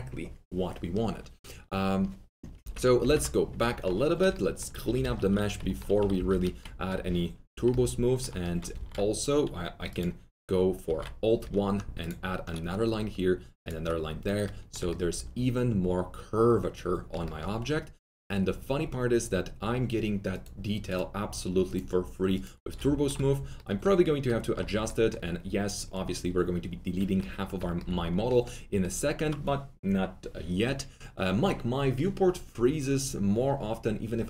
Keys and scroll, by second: 2.6 ctrl+z, 4.8 alt+F3, 5.1 F4, 5.9 alt+F3, 6.3 F4, 8.7 alt+1, 10.6 alt+1.